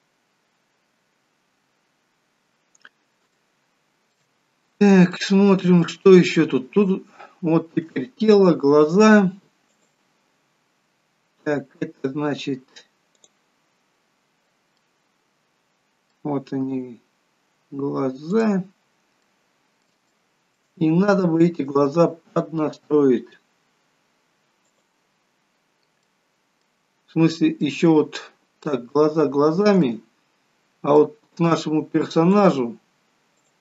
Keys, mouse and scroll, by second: 2.0-2.6 scroll down 2, 3.6 shift+middle click, 3.6 scroll down 1, 4.7-5.3 scroll up 2, 5.3 middle click, 6.6 middle click, 10.0 click, 13.5 click, 15.0 middle click, 18.5 click, 19.5 middle click, 20.4 shift+middle click, 25.0 click, 26.3 middle click, 27.2-27.8 scroll up 4, 27.9 middle click, 29.2 shift+middle click, 30.1 middle click, 32.6 click.